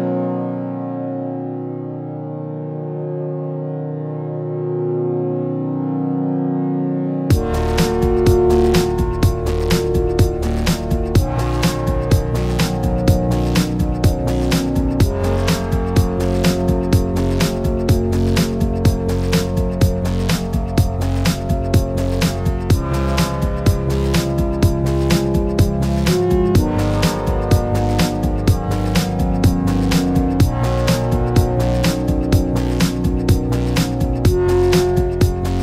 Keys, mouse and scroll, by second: 1.6 click, 2.1 click, 2.6 click, 5.6 click, 5.8 click, 6.0 click, 7.3 middle click, 7.3 Tab, 7.8 click, 7.9 click, 8.5 Tab, 8.5 click, 8.8 click, 9.0 g, 9.5 middle click, 9.6 middle click, 9.8 KP_Decimal, 9.9 scroll down 3, 10.1 shift+middle click, 10.4 click, 10.6 click, 10.8 click, 11.1 click, 11.2-11.6 scroll up 5, 11.3 shift+middle click, 11.6 click, 11.6 click, 12.1 click, 12.2 Tab, 12.5 click, 13.0 click, 13.9 click, 14.3 click, 14.5 click, 14.9 shift+middle click, 15.1 click, 15.1 click, 15.3 KP_Decimal, 15.4 scroll down 3, 15.6 click, 16.7-17.3 click, 17.0 click, 17.2 click, 17.6 click, 18.0 click, 18.2 shift+middle click, 18.6 shift+middle click, 18.7 click, 18.7 click, 19.1 click, 19.4 BackSpace, 19.4 BackSpace, 20.1 click, 20.4 click, 20.5 click, 20.7 click, 20.7 click, 20.9 click, 21.3 shift+middle click, 21.4 click, 21.5 click, 21.8 click, 22.8-23.5 click, 23.4 click, 24.0 click, 24.1 shift+middle click, 24.2 scroll up 2, 24.3 click, 24.3 click, 24.8 click, 25.5 click, 25.5 click, 25.9 click, 27.3 scroll down 3, 27.5 shift+middle click, 28.3 scroll down 2, 28.4 shift+middle click, 28.6 middle click, 28.7 ctrl+s, 28.8 shift+middle click, 29.3 click, 29.4 click, 29.5 click, 29.9 Tab, 30.0 middle click, 30.2 shift+middle click, 30.4 click, 30.6 shift+middle click, 30.7 click, 30.7 h, 30.8 h, 30.9 shift+middle click, 31.0 click, 31.1 click, 31.3 click, 31.4 h, 31.5 click, 31.6 h, 31.9 shift+middle click, 32.0 middle click, 32.1 scroll up 3, 32.2 middle click, 32.3 middle click, 32.6 middle click, 32.6 scroll down 1, 32.6 middle click, 32.9 middle click, 33.2 click, 33.3 middle click, 33.5 shift+click, 33.7 ctrl+shift+c, 34.0 middle click, 34.1 click, 34.2 shift+click, 34.3 ctrl+shift+c, 34.6 shift+middle click, 34.7 middle click, 34.8 click, 34.9 middle click, 35.1 shift+click, 35.2 ctrl+shift+c, 35.3 shift+middle click, 35.5 click.